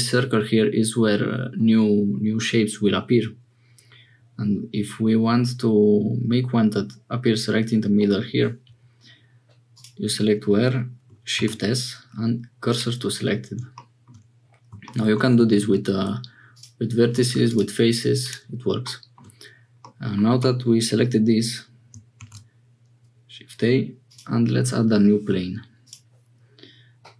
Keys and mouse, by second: 9.7 click, 11.3 shift+s, 13.7 middle click, 15.6 1, 16.5 click, 17.3 3, 19.8 middle click, 22.1 shift+a, 25.9-27.1 drag.